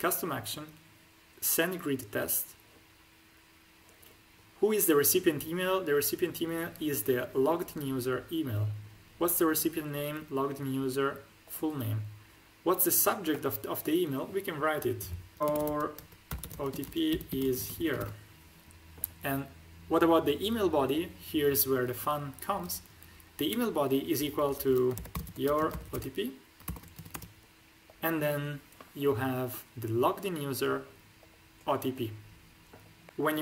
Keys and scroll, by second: 15.4-17.9 typing, 24.9-27.0 typing.